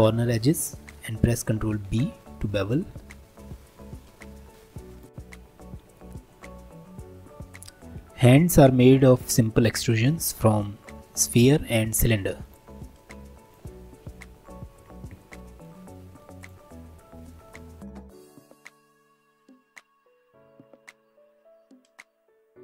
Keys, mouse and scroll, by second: 1.6 ctrl+b, 5.1 click, 7.9 shift+a, 12.4-17.9 drag, 17.9 right click, 18.7-19.0 scroll down 7, 19.0-19.4 drag, 19.4 shift+middle click, 19.6 Tab, 19.7 middle click, 19.8 3, 19.9 scroll down 2, 20.0 middle click, 20.5 alt+z, 21.5 3, 21.7 click, 22.2 x, 22.5 2.